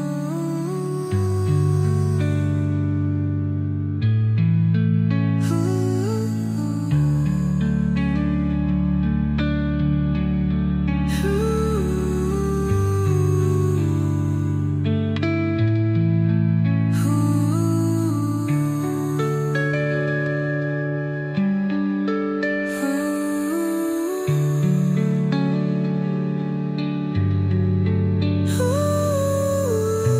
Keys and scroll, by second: 2.0 space, 4.1 Delete.